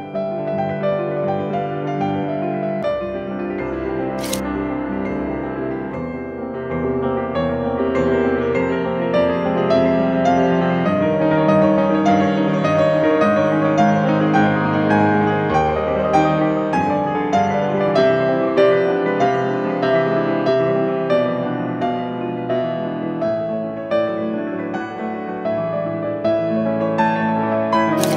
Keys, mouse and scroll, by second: 8.5 BackSpace, 11.1-11.8 scroll up 2, 14.1 scroll down 2, 14.3 scroll up 2, 14.4 middle click, 14.6 scroll down 2, 14.7 scroll up 2, 15.3 click, 15.8 scroll down 2, 15.9 scroll up 2, 16.5 click, 16.7 8, 17.1 BackSpace, 17.5 5, 18.1 scroll up 2, 18.4 scroll down 2, 18.5 scroll up 1.